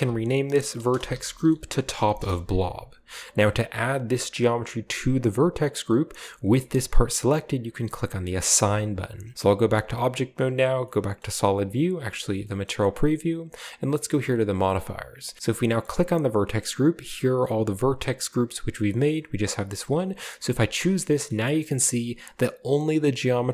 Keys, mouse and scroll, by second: 0.0-2.7 typing, 6.4 g, 6.9 right click, 8.6 click, 9.6 Tab, 10.0 z, 11.6 shift+z, 14.1 click, 15.9 click, 20.0 click, 20.6 space, 21.0-21.6 scroll down 1, 21.6-22.2 scroll up 1.